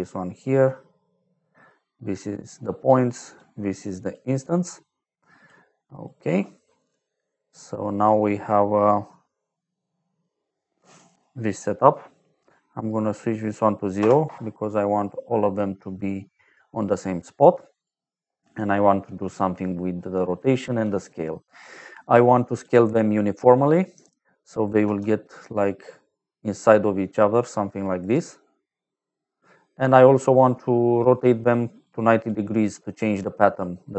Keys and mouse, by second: 1.3 click, 3.0 click, 4.6 click, 6.0 click, 7.1 middle click, 10.1 click, 13.1 click, 13.9 KP_0, 14.2 Return, 15.6 middle click, 17.1 click, 20.0 middle click, 22.3 click, 24.9 d, 25.6 click, 28.0 click, 30.9 click, 31.8 click, 33.4 middle click.